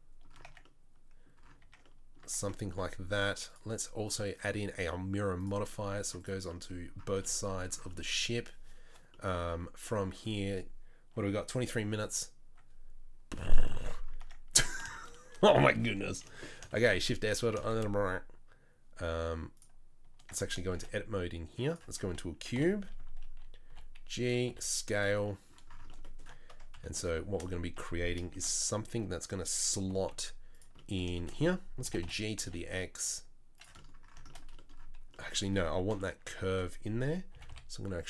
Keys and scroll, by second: 0.4 Tab, 1.6 Tab, 2.2 Tab, 14.2 Tab, 14.5 Tab, 16.7 shift+s, 17.6 shift+a, 20.3 Tab, 20.7 shift+a, 22.5 KP_7, 23.7 g, 24.5 s, 26.7 KP_3, 29.8 g, 31.8 g, 36.0 KP_3, 37.3 g.